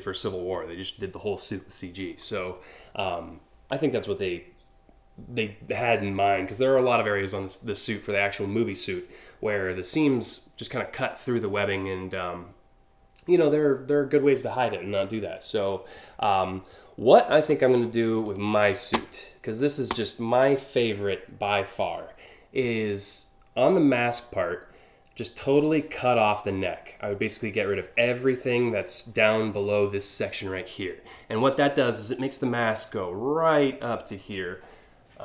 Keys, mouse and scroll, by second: 2.8 click, 17.9 click.